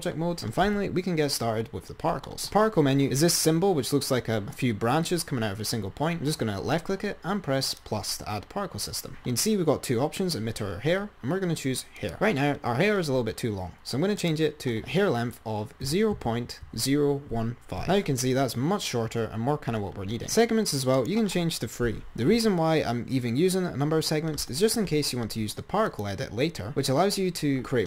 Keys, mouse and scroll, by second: 0.9 Tab, 2.6 click, 6.0 click, 7.8-10.2 drag, 12.0 click, 14.5-16.8 drag, 18.8-19.7 scroll up 5, 21.3-23.3 drag, 26.1-27.8 drag.